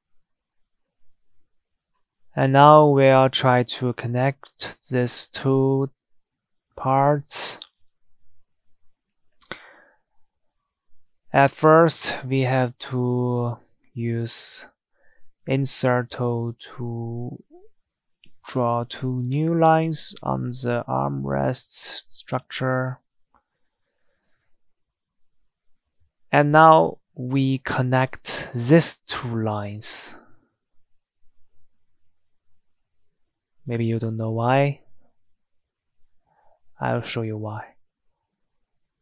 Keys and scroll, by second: 32.5 Escape.